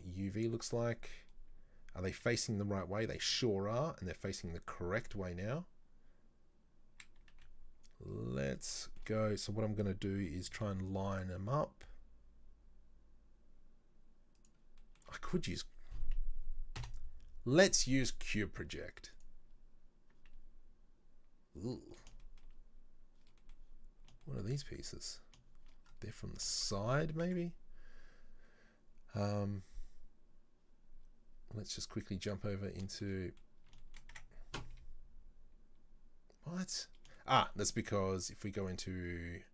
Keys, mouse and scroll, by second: 0.0 click, 7.4 s, 23.4-25.9 middle drag, 25.9 scroll up 3, 26.1 middle click, 26.9-27.2 scroll up 2, 27.2 Tab, 32.3 click, 32.8-34.1 shift+middle drag, 34.1 Tab, 37.2-38.7 shift+middle drag, 38.7 click.